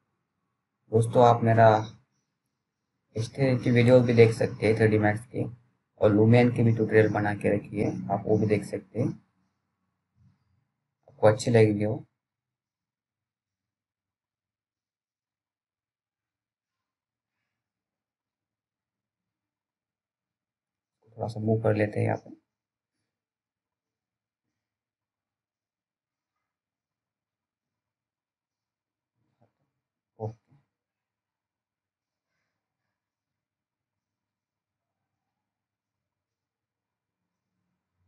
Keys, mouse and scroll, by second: 0.1 ctrl+z, 0.6 click, 0.7 click, 0.9-1.8 scroll down 1, 1.8 p, 2.2-2.7 scroll down 1, 2.7 click, 2.8 click, 9.6 c, 11.1 click, 12.2 t, 12.9 scroll down 1, 13.2-13.6 scroll up 1, 13.9-15.4 scroll down 1, 15.4-15.9 scroll up 1, 15.9-17.0 scroll down 1, 17.0 middle click, 17.6 click, 18.3-19.2 scroll up 1, 19.2 click, 20.5 z, 21.1-22.9 scroll down 1, 23.5 F3, 25.0 click, 27.2 scroll down 1, 27.5 middle click, 27.7-28.3 scroll up 1, 28.3 click, 28.3 click, 30.3 c, 32.0 F3, 36.2 click.